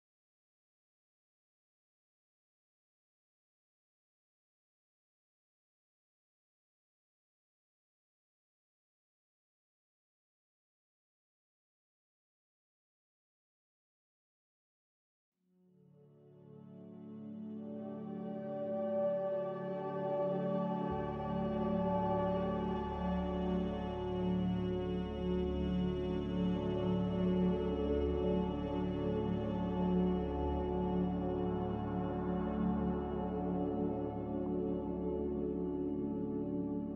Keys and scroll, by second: 10.6 c, 22.9 ctrl+z, 23.3 ctrl+z, 30.6 Delete, 32.9 ctrl+s.